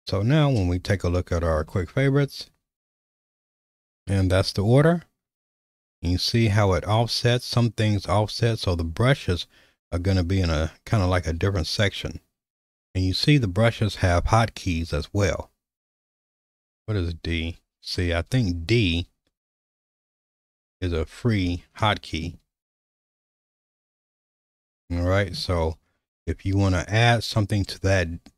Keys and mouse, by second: 1.1 shift+middle click, 2.6 q, 16.1-19.2 typing, 20.9-23.8 typing, 21.9 middle click, 24.6 shift+middle click.